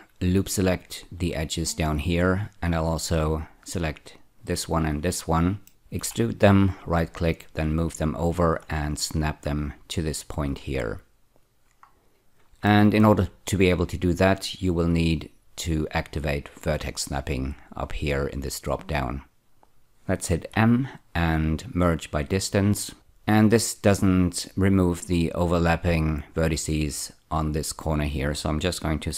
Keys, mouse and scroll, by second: 1.2 ä, 1.9-2.7 scroll up 3, 3.1 shift+click, 4.4 shift+click, 5.7 middle click, 6.0 4, 6.6 right click, 7.8 click, 11.7-12.4 scroll down 1, 12.7 shift+middle click, 15.2 click, 20.5 m, 22.1 click.